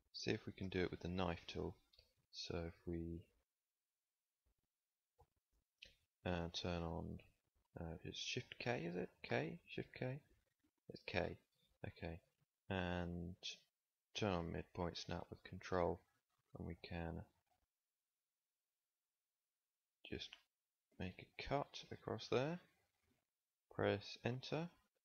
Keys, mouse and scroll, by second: 0.5 z, 7.3-9.2 middle drag, 9.2 k.